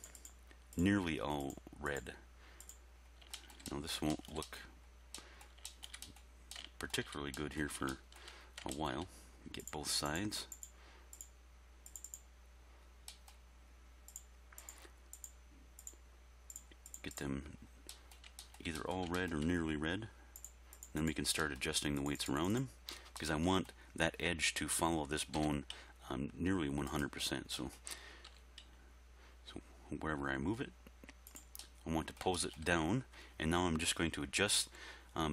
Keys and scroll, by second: 25.4 r, 25.7 x, 28.3 r, 28.6 x.